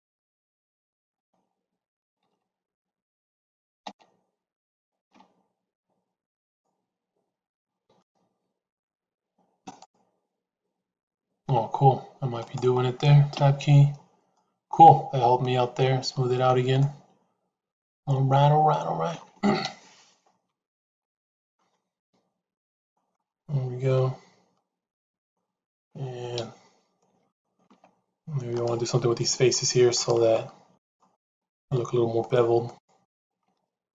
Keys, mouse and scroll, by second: 1.1 a, 2.7 ctrl+z, 3.7 l, 4.9 shift+e, 7.7 ctrl+r, 13.3 Tab, 14.3-16.4 middle drag, 16.7-19.0 middle drag, 19.5 KP_3, 20.9 middle click, 22.7 shift+middle click, 23.9-25.3 middle drag, 26.3 KP_3, 27.6 Tab, 28.4 click, 29.9 click, 30.7 click, 31.1 shift+click, 31.4 shift+click, 32.1 shift+click, 32.5 shift+click, 33.0 shift+click.